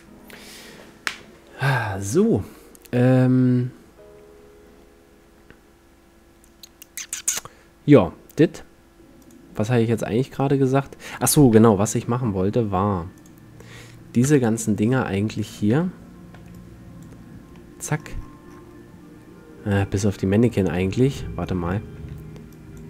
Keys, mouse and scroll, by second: 0.0 F11, 3.0-4.7 drag, 4.7 right drag, 4.8 click, 4.8 right click, 4.9 click, 7.3-9.1 middle drag, 9.3-11.7 drag, 13.3-14.4 drag, 14.4 KP_7, 14.9-15.8 middle drag, 15.8 z, 16.5 b, 17.7-20.7 middle drag, 21.1-22.8 middle drag, 21.7 a, 22.3 c.